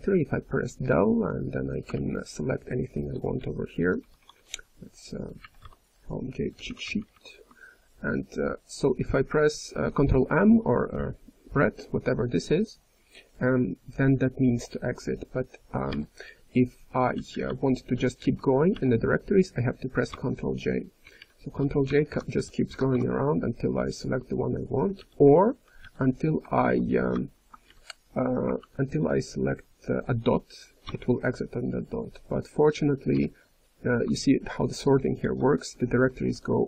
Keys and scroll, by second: 1.9-3.3 ctrl+n, 3.3 ctrl+p, 3.8 ctrl+p, 5.3 ctrl+n, 5.6 Return, 15.9 i, 17.1 ctrl+n, 17.5 ctrl+n, 17.8 ctrl+n, 18.1 ctrl+p, 18.7 ctrl+n, 20.1 ctrl+j, 21.0 ctrl+p, 21.5 ctrl+j, 21.8 ctrl+p, 22.0 ctrl+p, 22.3 ctrl+n, 22.7 ctrl+p, 22.9 ctrl+j, 24.9 ν, 27.6 i, 28.5 ctrl+n, 28.9 ctrl+p, 33.1 ctrl+j, 33.1 i, 34.2 ctrl+n, 34.6 ctrl+n, 35.1 ctrl+p, 35.2-36.3 ctrl+p, 36.3 ctrl+n, 36.4 ctrl+n.